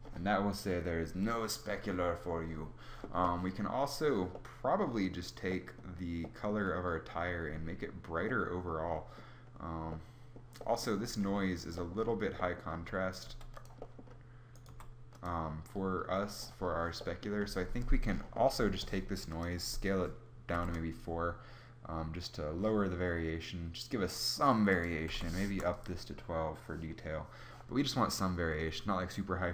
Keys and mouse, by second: 4.0 middle click, 12.9 g, 14.3 g, 18.9-21.1 drag.